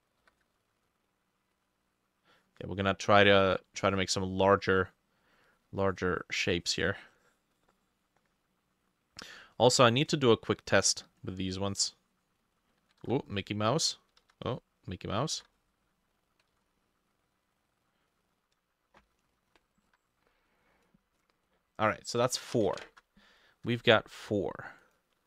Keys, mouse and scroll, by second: 0.2 e, 1.1 shift+click, 13.1 ctrl+z, 14.3 ctrl+z, 15.1 click, 15.4 ctrl+z, 16.6 ctrl+z, 19.9 t, 21.2-21.5 scroll down 1, 21.5-22.0 scroll up 1, 22.9 ctrl+shift+a.